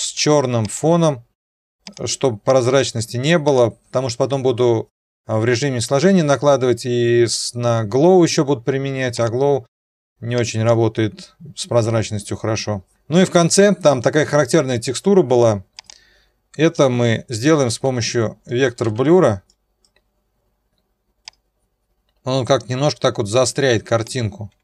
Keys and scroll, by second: 18.8 ..